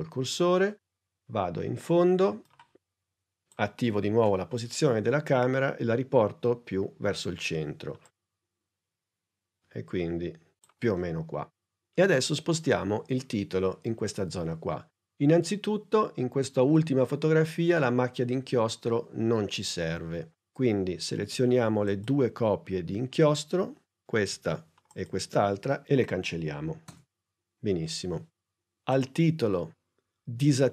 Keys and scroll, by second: 4.0 p, 26.8 BackSpace.